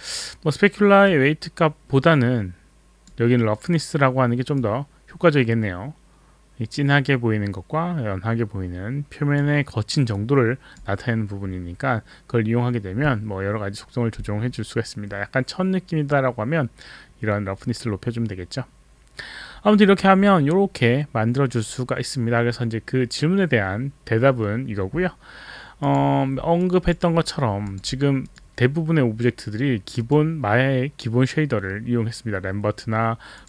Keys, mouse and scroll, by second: 1.0 click, 4.5 click, 10.1 click, 25.8 click, 26.6 alt+click, 27.2 alt+middle click, 27.6 alt+click, 28.2 click, 29.9 click, 33.3 click.